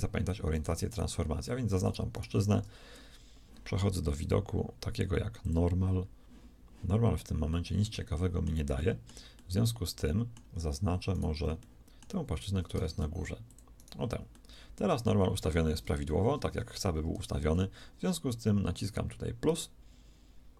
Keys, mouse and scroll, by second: 7.5 middle click, 12.9 ctrl+shift+Tab, 16.4 KP_3.